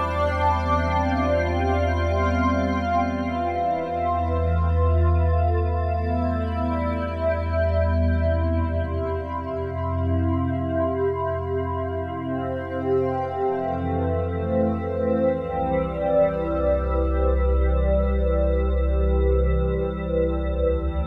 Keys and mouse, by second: 0.7 ctrl+s, 1.7 click, 3.1 click, 6.7 click, 7.9 click, 9.9 click, 11.1 click, 13.4 click, 15.0 click, 16.4 click, 17.1-20.9 drag, 20.9-21.0 typing.